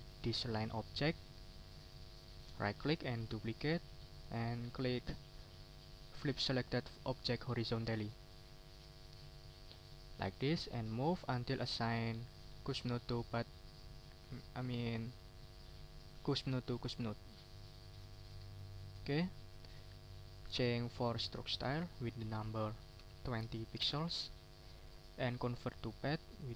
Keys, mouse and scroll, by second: 0.1 right click, 3.1 click, 9.8 click, 10.9-14.1 drag, 14.2-14.8 ctrl+scroll up 1, 15.1-17.0 ctrl+drag, 17.2 ctrl+scroll down 1, 17.9 ctrl+scroll up 1, 18.5 ctrl+shift+click, 19.5 click, 21.0 click, 21.8 click, 23.0 2, 23.4 0, 23.8 Return, 24.3 click, 26.1 click.